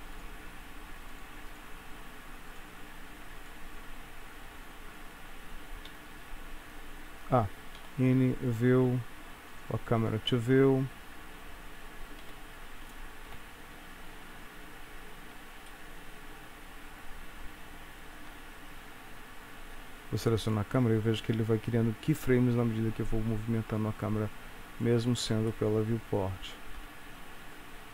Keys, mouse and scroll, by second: 3.5 click, 6.0 n, 7.8 n, 8.6 click, 9.6 click, 12.3 n, 13.4 Home, 14.3-14.8 scroll down 2, 15.0-15.4 scroll up 1, 15.8 shift+middle click, 20.6 click, 22.8 click, 25.6 shift+middle click, 27.7 click.